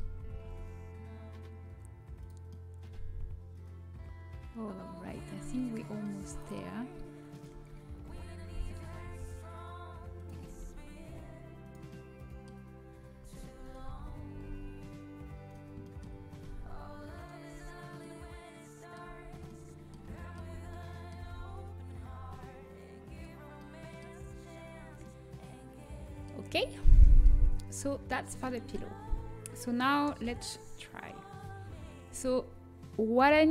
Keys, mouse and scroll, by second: 0.3 g, 3.7-4.9 middle drag, 6.0-7.3 middle drag, 7.3-10.1 drag, 7.5 g, 10.4 g, 11.8-16.6 middle drag, 13.2 z, 14.3 z, 16.6 z, 17.1-19.0 middle drag, 17.5 z, 19.0 z, 21.1 g, 26.4 a, 27.3 Tab, 30.2 ctrl+s, 31.0-32.5 middle drag.